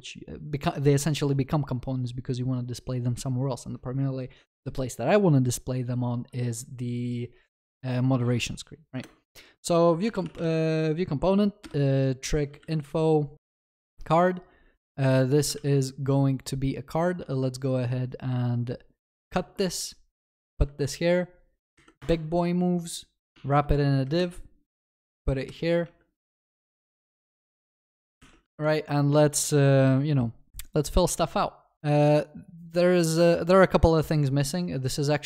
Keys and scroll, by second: 15.6 ctrl+s, 23.3 Tab, 24.2 alt+shift+Down, 25.9 alt+shift+Up, 26.6 ctrl+s, 28.2 ctrl+y.